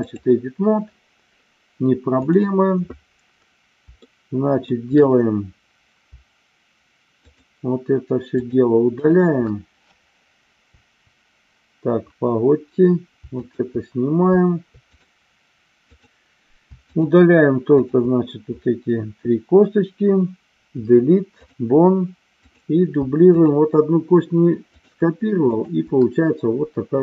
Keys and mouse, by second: 2.2 click, 4.1 shift+middle click, 7.2 shift+click, 8.4 shift+click, 8.9 shift+click, 10.6 Delete, 14.9 click, 15.9 click, 16.9 shift+click, 17.7 shift+click, 20.6 Delete, 22.5 click, 23.2 shift+click, 24.7 shift+click, 25.3 shift+click.